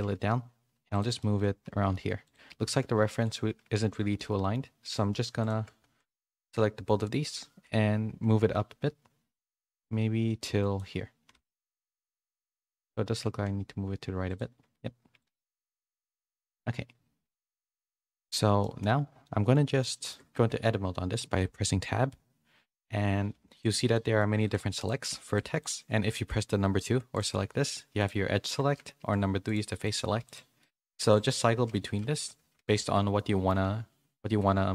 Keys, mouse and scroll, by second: 0.0 g, 1.6 g, 2.6 s, 3.7 z, 4.1 middle click, 4.1 scroll up 1, 4.9 click, 6.4 KP_1, 7.6 g, 12.9 g, 15.5 s, 16.3 middle click, 17.4 KP_3, 19.2 middle click, 19.5 middle click, 19.8 middle click, 20.3 Tab, 23.3 1, 23.9 middle click, 24.8 click, 25.2 shift+click, 25.6 shift+click, 27.1-28.3 drag, 28.4 click, 30.6 middle click, 31.4-32.7 typing, 33.1 middle click.